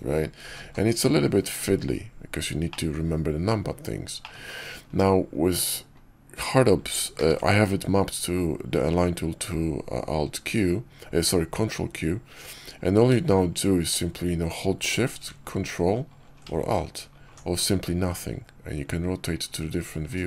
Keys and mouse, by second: 0.0-0.5 typing, 2.6 click, 4.1 middle click, 7.1 ctrl+q.